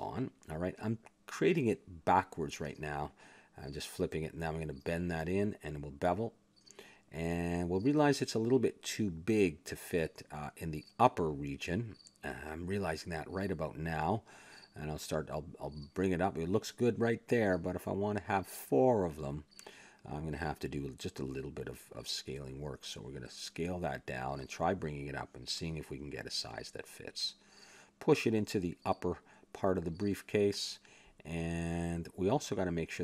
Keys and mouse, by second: 0.7 x, 1.6 a, 1.9-3.4 middle drag, 3.0 r, 4.5 click, 5.1 s, 6.2 click, 7.1 ctrl+b, 8.0 a, 8.6 Tab, 9.7-11.6 drag, 11.8 middle click, 12.5 click, 14.6-16.7 middle drag, 23.0 Tab, 23.8 a, 24.2 s, 25.4 click, 26.4 KP_Decimal, 26.7-27.8 middle drag, 27.8 click, 29.1 click, 30.2 s, 31.2 click, 31.8 click, 32.1 Tab.